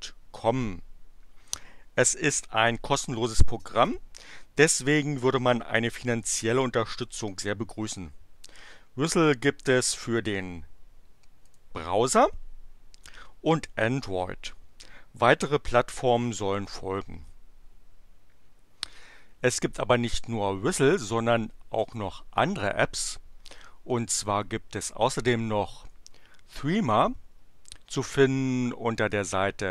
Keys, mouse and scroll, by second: 11.4 click, 24.2 click.